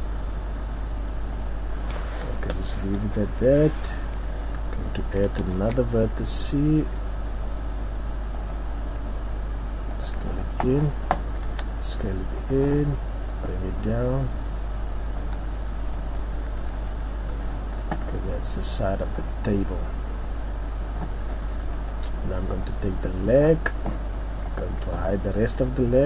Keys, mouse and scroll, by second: 1.5 right click, 1.8-2.1 scroll down 3, 2.7 middle click, 3.4 scroll up 2, 5.6 ctrl+r, 10.1 click, 11.5 s, 12.5 click, 13.6 click, 15.6 Tab, 15.9-16.7 scroll down 3, 16.0 middle click, 16.7 middle click, 17.3 scroll down 2, 17.6 middle click, 18.0-18.4 scroll up 3, 18.4 middle click, 19.0 scroll up 1, 19.3 scroll down 1, 19.3 middle click, 19.8-20.5 scroll up 2, 20.7 scroll down 3, 21.7 middle click, 22.9 right click.